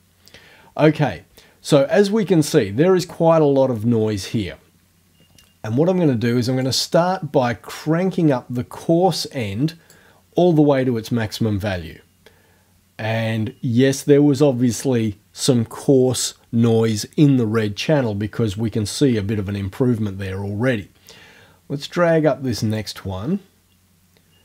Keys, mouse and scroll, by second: 6.7-10.1 drag, 22.8-24.4 drag.